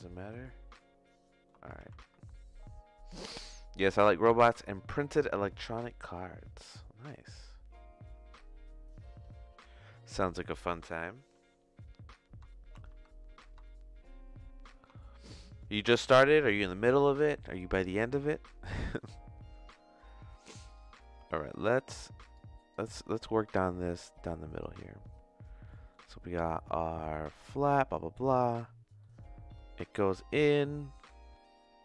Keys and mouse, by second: 0.6 shift+middle click, 1.7 ctrl+z, 12.5 shift+middle click, 12.9 Tab, 13.6-14.8 shift+middle drag, 18.3 shift+middle click, 18.9 middle click, 19.8 click, 20.6 click, 21.5 click, 22.3 click, 23.8 click, 25.6 middle click, 27.9 middle click, 29.0 middle click, 30.2 middle click.